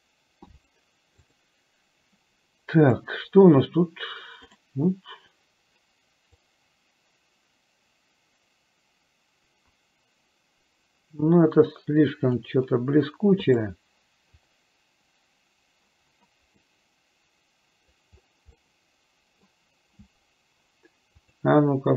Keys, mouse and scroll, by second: 17.0-18.3 middle drag, 18.8 middle click.